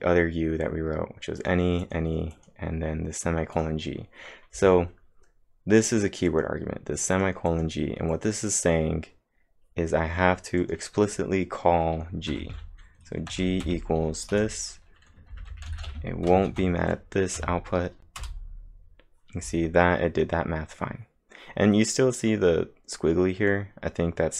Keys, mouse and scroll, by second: 0.0-0.5 typing, 1.4 click, 1.6-2.3 typing, 1.8 click, 2.4 click, 6.1-6.8 typing, 6.3 click, 7.2 click, 12.3-13.7 typing, 15.1-16.0 typing, 16.5 ctrl+`, 17.4 Up, 18.2 Return, 19.9-20.7 typing.